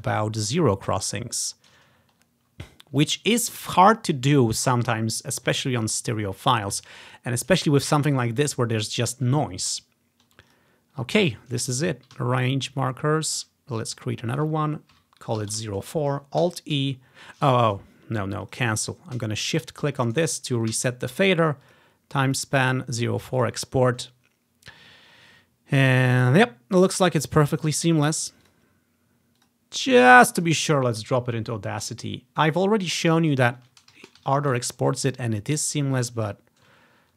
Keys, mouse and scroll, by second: 0.3 scroll down 1, 0.8 scroll up 1, 2.0-3.1 ctrl+scroll down 1, 6.7-7.0 ctrl+scroll down 4, 7.1 ctrl+scroll up 2, 7.8 scroll down 1, 9.9 scroll down 1, 10.6 click, 12.5 ctrl+click, 13.5-15.5 ctrl+drag, 15.0-15.5 typing, 15.6 Return, 16.5 alt+e, 18.5 click, 18.7 typing, 19.5 shift+click, 20.8 typing, 21.7-25.2 drag, 28.5-29.6 drag, 29.6 click, 30.5 click, 30.9-32.3 drag, 32.6 click, 33.1 click, 33.2 click, 34.0 ctrl+c, 34.3 Right, 34.6 ctrl+v, 35.3 scroll down 1, 36.1 click.